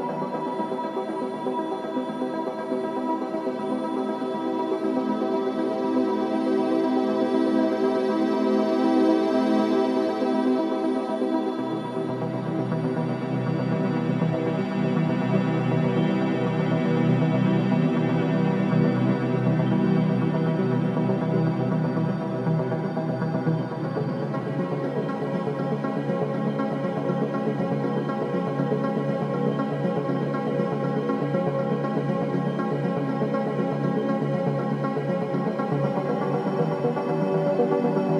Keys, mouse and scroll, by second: 0.5-0.8 scroll up 1, 0.9 alt+middle click, 1.6 alt+click, 2.2 alt+right click, 3.0 alt+right click, 4.2 click, 6.0 right click, 6.9 click, 8.4 alt+middle click, 8.8-16.7 shift+right drag, 16.7 w, 17.4 alt+click, 18.0 alt+right click, 18.3 click, 18.9 alt+right click, 19.6 right click, 19.9 click, 20.5 alt+click, 20.8 alt+right click, 21.1 alt+click, 21.5 alt+middle click, 21.8 alt+right click, 22.4 alt+click, 23.4 alt+middle click, 23.7 alt+click, 24.2 alt+right click, 24.4 alt+click, 24.7 alt+middle click, 25.6 ctrl+s, 26.1 alt+click, 26.7 alt+right click, 27.1 alt+middle click, 27.7 alt+click, 29.0 alt+right click, 29.3 alt+middle click, 29.9 alt+click, 30.3 alt+middle click, 33.5 click, 33.5 w, 34.0 alt+click, 34.5 alt+right click, 35.7-36.1 scroll down 1, 36.1-38.1 drag.